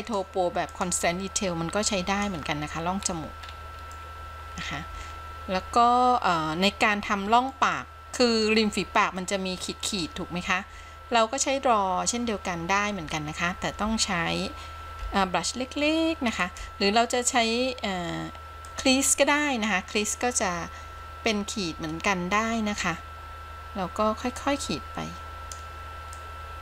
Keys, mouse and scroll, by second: 0.1 click, 2.1 click, 3.2-4.1 scroll up 2, 4.1 middle click, 5.3-7.5 scroll down 1, 7.7-8.7 middle drag, 8.8-9.4 scroll up 1, 9.4 middle click, 15.1 f, 16.6 f, 18.9 click, 24.6-25.8 drag, 26.4-26.6 drag.